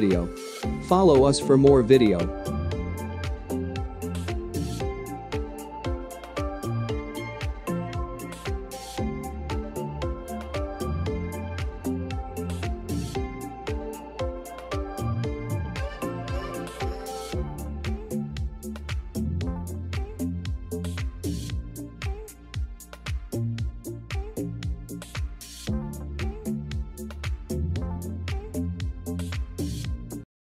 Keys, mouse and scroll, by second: 0.4-5.2 drag.